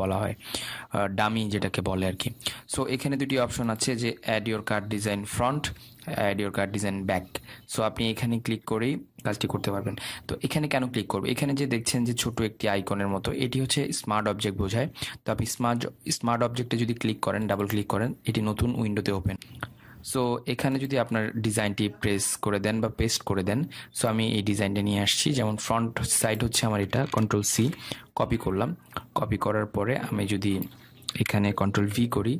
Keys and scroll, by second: 28.3 ctrl+c.